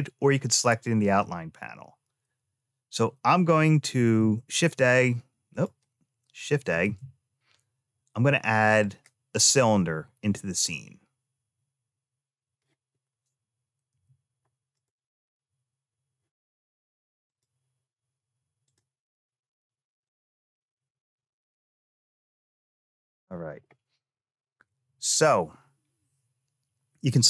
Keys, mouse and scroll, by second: 3.7 ctrl+a, 5.3 click, 6.6 shift+a, 13.7 n, 14.5 click, 15.0 n, 17.0 click, 18.4 click, 19.8-21.6 drag, 22.4 n, 23.9 click, 27.0 click.